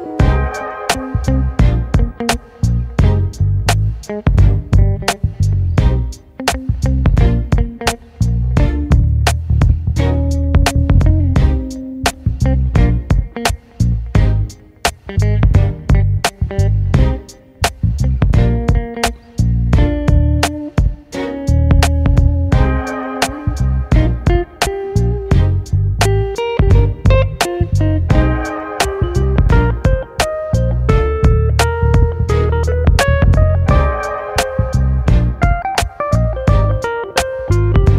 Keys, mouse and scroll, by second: 0.1 alt+z, 0.9 alt+h, 1.2-2.2 scroll down 3, 2.2 click, 2.9 z, 3.2 click, 3.8 KP_Decimal, 4.2 ctrl+space, 4.6-4.9 scroll up 3, 4.9-6.5 middle drag, 6.5-8.6 drag, 8.6 right click, 8.8 scroll down 1, 9.0-10.1 middle drag, 10.1-11.1 scroll up 1, 11.1 middle click, 11.9 Tab, 12.8 shift+middle click, 13.2-13.5 scroll up 4, 13.5 scroll down 1, 13.7-16.5 shift+middle drag, 16.5 ctrl+r, 19.0 click, 19.9 g, 22.6 middle click, 23.5 KP_7, 23.8 alt+z, 24.1 shift+middle click, 24.4 1, 24.6-25.1 scroll up 5, 25.1 shift+middle click, 25.4-25.9 scroll up 4, 25.9-26.4 scroll down 1, 26.4 click, 26.8 g, 27.8 click, 28.6 click, 28.7 g, 29.4 g, 30.2 click, 30.4 g, 31.7 click, 31.8 g, 32.7 click, 32.8 g, 33.4 g, 33.9 click, 34.1-34.5 scroll down 5, 34.5 alt+z, 34.8 middle click, 35.3 Tab, 35.8-36.5 scroll down 1, 36.5 KP_1, 36.9 Tab, 37.4 click.